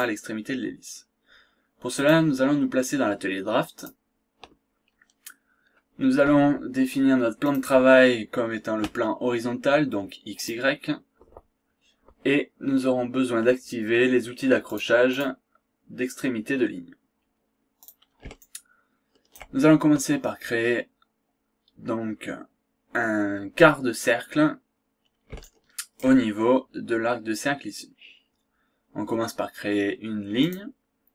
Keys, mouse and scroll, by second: 1.9 click, 3.7 click, 4.7 scroll down 1, 5.0 scroll up 1, 7.4 click, 10.3 click, 14.7 click, 17.9 click, 18.4-19.7 shift+right drag, 25.4 shift+right click, 30.4 click.